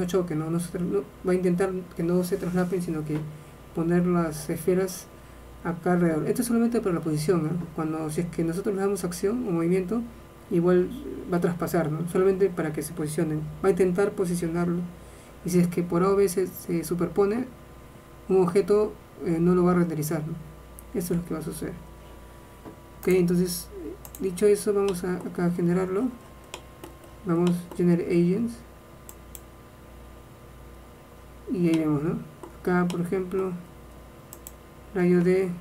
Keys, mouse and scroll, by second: 21.3 shift+space, 31.1 middle click, 31.9-35.6 middle drag.